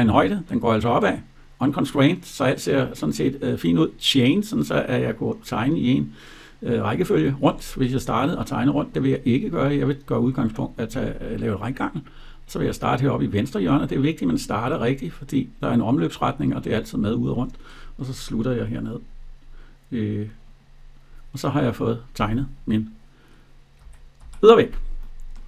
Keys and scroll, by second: 23.6 Escape.